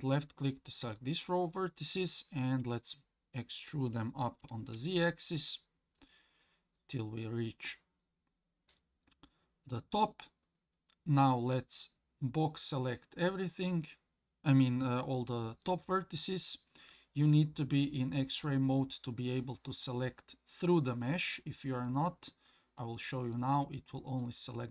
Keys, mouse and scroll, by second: 2.6 e, 11.7-15.3 drag, 18.4 click, 21.9 click, 23.3 click, 24.2 click.